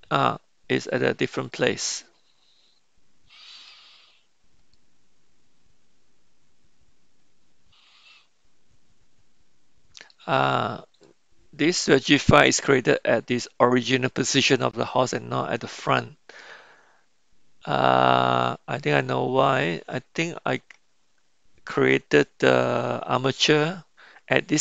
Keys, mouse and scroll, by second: 1.5-3.7 middle drag, 4.7-10.1 middle drag, 11.0-11.9 middle drag.